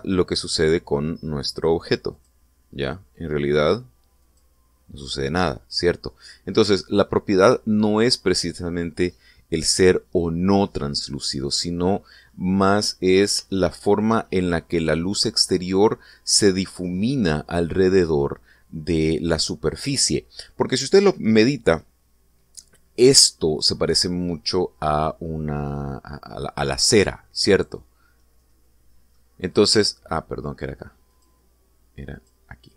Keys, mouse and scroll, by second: 2.9 click, 4.9 click, 12.3-13.2 middle drag, 13.5-13.9 scroll up 1, 14.3 shift+middle click, 15.0 shift+middle click, 23.1 scroll down 2, 29.0-30.1 middle drag, 31.9 click.